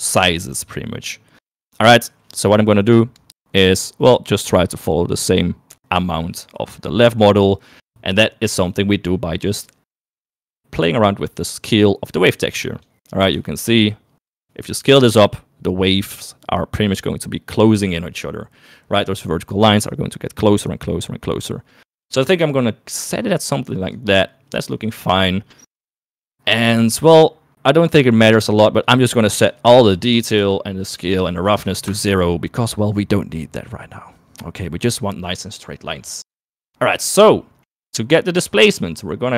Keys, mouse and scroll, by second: 6.7 shift+middle click, 8.2 shift+middle click, 10.4-12.7 drag, 13.3 shift+middle click, 14.6-23.8 shift+drag, 28.7-30.5 drag, 30.8 click, 31.4 click, 36.7 middle click, 37.6 middle click, 38.6 middle click.